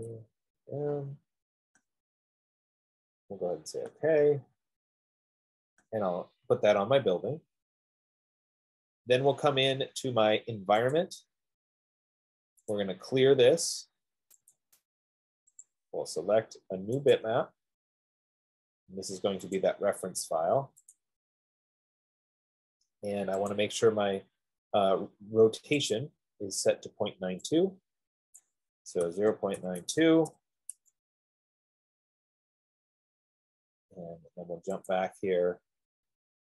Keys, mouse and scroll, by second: 0.0-0.1 typing, 3.1 click, 4.4 click, 6.4 click, 7.4 F15, 11.3 click, 13.1 right click, 14.7 click, 15.9 click, 17.4 click, 21.3 click, 24.1 click, 29.0 click, 29.3-30.0 typing, 31.0 Tab, 32.2-33.7 drag, 35.4 click.